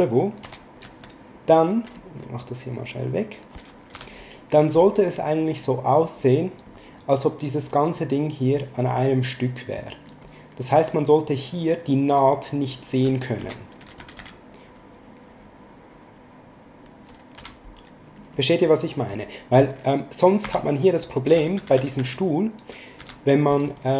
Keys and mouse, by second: 0.5 e, 0.8 s, 2.0 click, 4.0 b, 5.6 click, 11.5 click, 13.4 e, 14.3 click, 17.4 b, 18.2 click, 20.4 b.